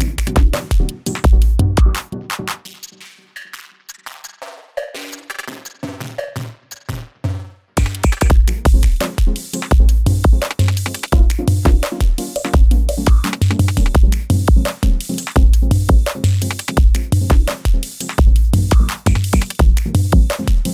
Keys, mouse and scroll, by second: 2.4 ctrl+i, 4.7 click, 6.0-7.4 scroll up 1, 7.4 click, 11.0-12.3 drag, 17.1-20.7 drag.